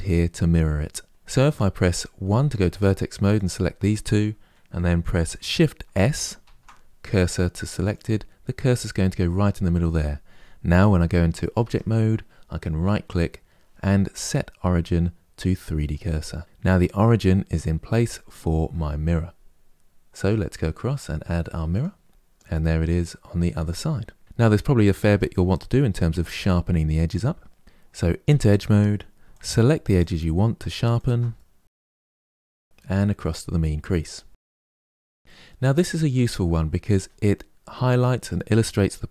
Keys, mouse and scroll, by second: 1.9 1, 2.5 click, 3.0 shift+click, 6.1 shift+s, 11.3 Tab, 12.5-16.3 right drag, 16.3-18.2 middle drag, 19.8-22.1 drag, 22.1 scroll down 3, 22.2-24.2 middle drag, 24.2-24.8 scroll up 3, 24.8 Tab, 25.2-27.6 middle drag, 28.0 2, 29.0 alt+click, 29.7 alt+shift+click, 30.7 alt+shift+click, 31.1 middle click, 31.9 alt+shift+click, 33.0-35.1 drag, 35.1 middle click, 35.8 Tab, 36.2-39.0 middle drag.